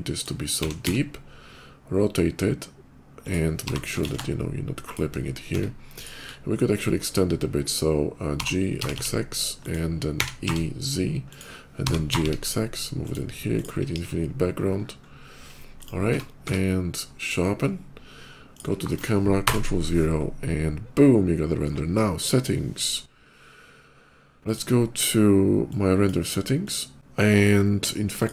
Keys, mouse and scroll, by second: 0.4 r, 0.6 z, 0.7 r, 3.0 click, 3.2 z, 3.5 g, 3.8 shift+z, 4.0 g, 4.7 shift+click, 5.3 Tab, 5.8 click, 6.0 middle click, 6.3 middle click, 8.2 g, 8.7 g, 8.7 x, 8.9 x, 9.5 click, 10.0-12.2 typing, 11.1 click, 12.9 click, 13.4 click, 13.7 ctrl+b, 15.6 click, 15.8 Tab, 16.3 q, 16.4 Tab, 17.0 click, 18.3 click, 20.0 ctrl+middle click, 25.5 click, 26.3 click, 27.9 click.